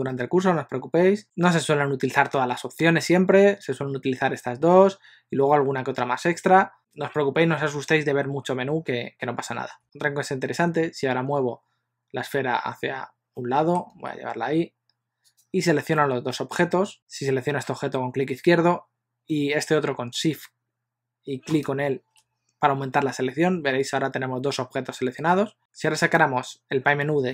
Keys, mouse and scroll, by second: 9.8 middle click, 13.4 middle click, 13.9 g, 15.7 scroll down 1, 16.0 middle click, 16.9 click, 21.7 shift+click.